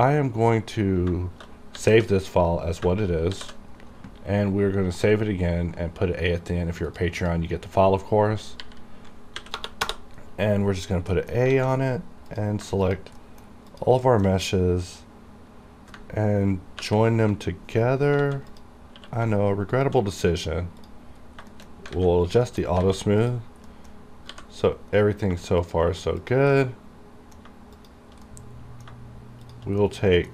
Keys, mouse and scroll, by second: 1.2 shift+Num_Lock, 1.2 scroll down 1, 1.8 ctrl+s, 3.4 shift+s, 7.0 click, 8.7 Right, 9.4 a, 11.3 middle click, 11.6 alt+a, 11.9 scroll up 1, 12.4 click, 13.0 shift+click, 13.3 shift+middle click, 13.8 shift+click, 14.2 shift+middle click, 16.9 j, 18.0 scroll up 1, 18.3 alt+a, 18.6 click, 19.0 q, 19.8 shift+click, 20.9 click, 21.2-21.5 scroll down 1, 21.6 shift+middle click, 21.9 shift+scroll up 2, 22.1 alt+a, 22.3 scroll down 1, 22.6 shift+middle click, 22.8 shift+scroll up 1, 22.9 alt+a, 23.3 click, 23.8 middle click, 24.4 g, 25.0 right click, 25.7 shift+click, 26.7 shift+middle click, 27.8 shift+click, 28.4 middle click, 29.6 shift+click, 29.9 middle click.